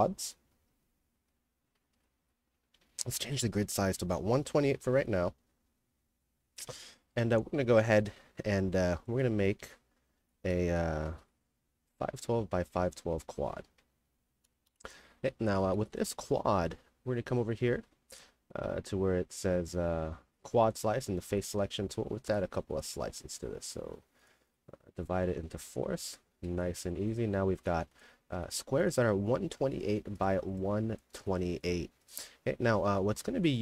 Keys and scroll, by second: 0.0-2.0 typing, 4.0 d, 10.3-11.5 typing, 12.9-13.8 typing, 14.7 KP_Enter, 14.9-16.2 typing, 32.4-33.6 typing.